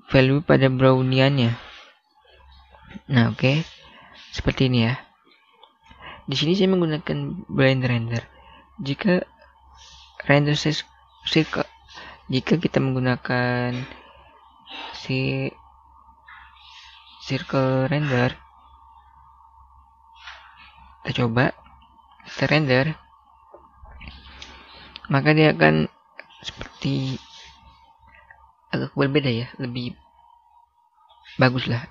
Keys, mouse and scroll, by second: 1.5 middle click, 7.1 click, 20.7 click, 22.3 F12, 30.3-31.0 scroll down 1, 31.0-31.3 scroll up 1, 31.7 middle click.